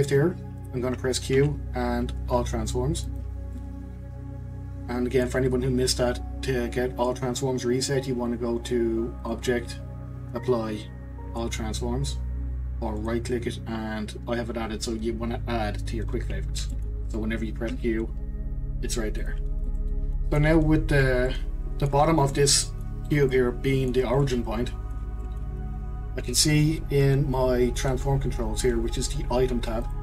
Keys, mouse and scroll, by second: 1.4 q, 3.5-6.6 middle drag, 9.2-12.4 drag, 16.7-17.7 middle drag, 17.7 q, 19.6-20.9 middle drag, 20.9-21.3 scroll up 1, 21.3-28.2 middle drag, 29.8 click.